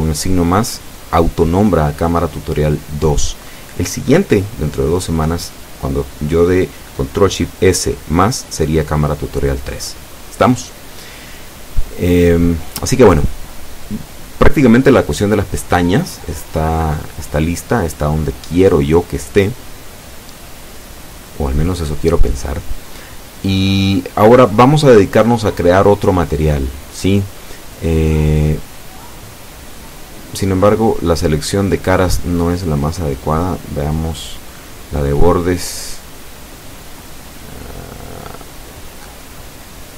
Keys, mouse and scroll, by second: 1.3 ctrl+shift+s, 4.2 KP_Add, 13.4 KP_Enter, 27.2-27.6 scroll up 2, 28.2 Tab, 29.1-31.6 middle drag, 31.7-32.1 scroll up 2, 32.6 scroll down 2, 33.0 middle click, 35.0 click, 36.0 a, 36.7 shift+a, 37.1 alt+shift+right click, 37.9 alt+shift+a.